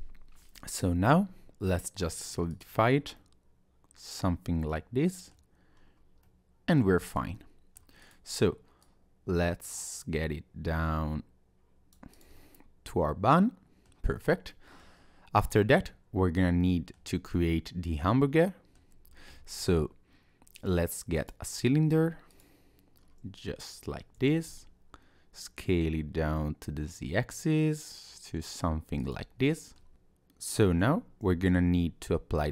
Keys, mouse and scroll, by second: 3.2 middle click, 5.7 scroll down 1, 6.3 middle click, 7.1 click, 7.3 middle click, 8.0 click, 8.8 click, 12.1 click, 12.4 middle click, 14.2-14.5 scroll up 1, 14.5 middle click, 15.0-15.4 scroll down 2, 15.4 click, 15.7 middle click, 17.3 middle click, 19.1 scroll up 1, 19.4 shift+a, 22.3 click, 23.0-24.0 scroll down 1, 24.2 s, 29.4 middle click, 29.9 Tab, 29.9 scroll up 1, 30.8 scroll up 1, 31.3 ctrl+a.